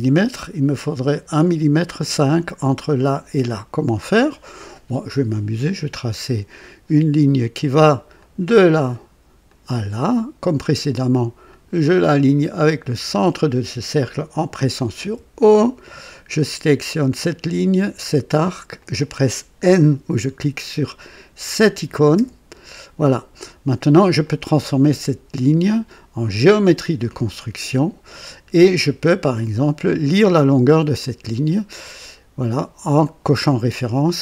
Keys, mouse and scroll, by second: 6.1 click, 8.1 click, 9.4 click, 9.9 right click, 11.4 click, 12.9 click, 14.9 o, 16.7 click, 18.7 click, 22.1 n, 24.1 click, 26.2 click, 27.4 scroll up 1, 29.3 click, 30.9 click, 32.9 click.